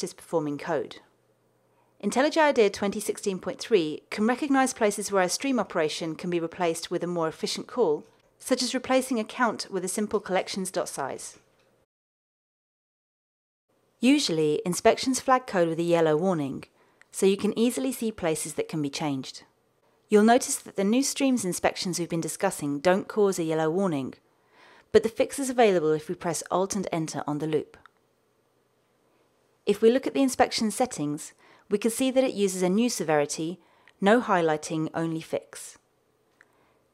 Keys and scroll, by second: 6.9 alt+Return, 15.1 super+z, 24.4 alt+Return.